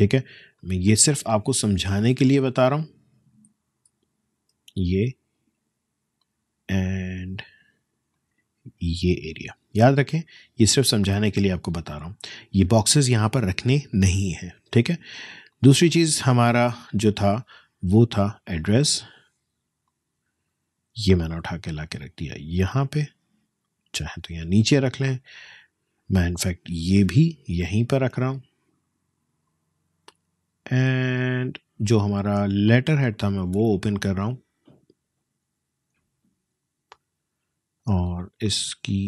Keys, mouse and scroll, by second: 3.9 ctrl+alt+z, 6.2-13.2 alt+shift+drag, 15.5-17.4 alt+shift+drag, 17.4 ctrl+alt+shift+z, 18.6-24.8 alt+shift+drag, 24.8-25.4 alt+shift+scroll up 1, 26.2-38.0 shift+drag, 38.0 shift+space, 38.2 shift+click, 38.5 shift+space.